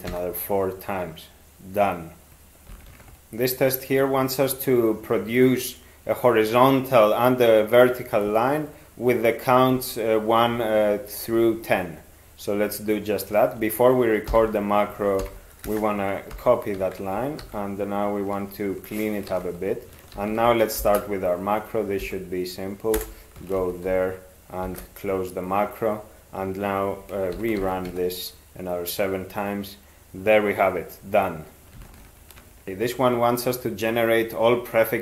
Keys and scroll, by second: 0.1 e, 14.3 ctrl+k, 15.2 ctrl+y, 15.7 Return, 16.3 ctrl+y, 16.8 ctrl+a, 17.4 alt+d, 19.3 ctrl+d, 20.1 ctrl+x, 20.8 (, 22.0 alt+f, 22.9 Return, 23.5 ctrl+x, 24.7 ), 27.3 ctrl+7, 27.6 ctrl+x, 27.9 e.